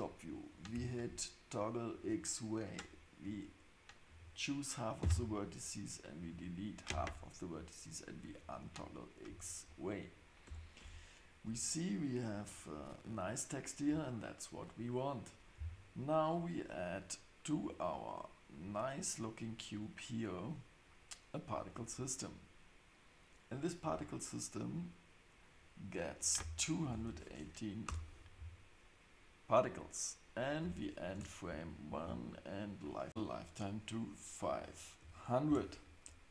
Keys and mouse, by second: 0.5 click, 2.1-4.2 drag, 5.0 x, 8.2 click, 10.4 Tab, 10.8 Tab, 13.9 Tab, 18.5-20.5 drag, 24.9-28.4 drag, 30.4-31.6 drag, 32.5-36.3 drag.